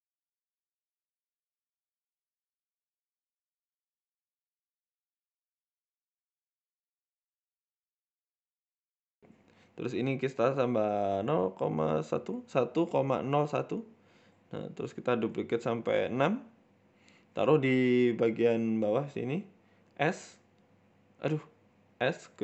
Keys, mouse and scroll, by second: 2.7 click, 4.2 scroll down 3, 4.6 click, 6.5 middle click, 6.9 middle click, 7.5 scroll down 3, 7.7 middle click, 9.1 click, 9.1 scroll up 1, 12.0 click, 12.2 click, 12.4 click, 12.6-13.0 scroll down 3, 13.5 click, 14.9 KP_1, 15.9 KP_3, 16.5 ctrl+KP_3, 17.0 shift+middle click, 17.9 scroll down 3, 18.5 g, 20.2-20.8 scroll up 2, 20.6 Tab, 20.8 g, 21.5 a, 21.7 g.